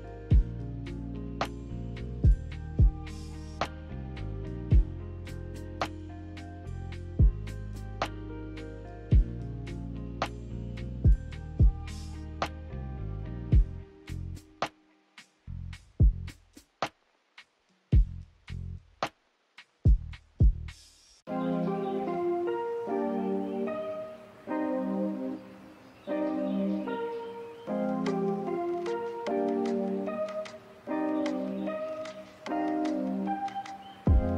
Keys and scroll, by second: 21.5 0, 21.5 Return.